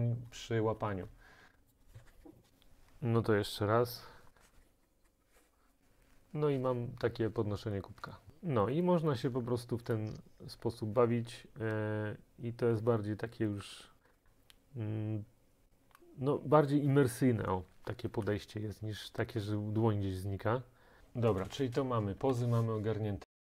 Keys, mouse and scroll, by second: 21.0 click, 22.4 ctrl+s.